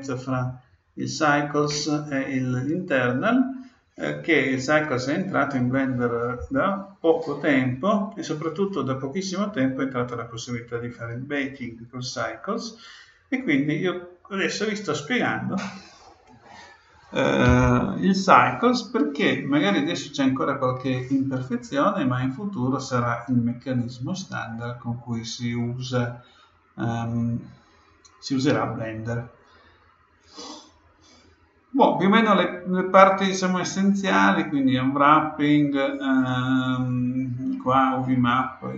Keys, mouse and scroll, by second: 32.3-35.3 middle drag.